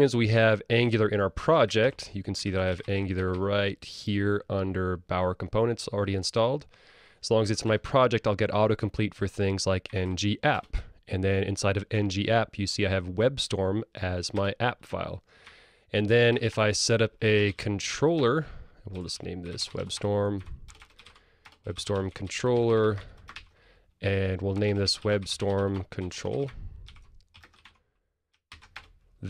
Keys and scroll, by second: 10.6 Return, 17.0 super+e, 21.7 Return, 27.7 Tab.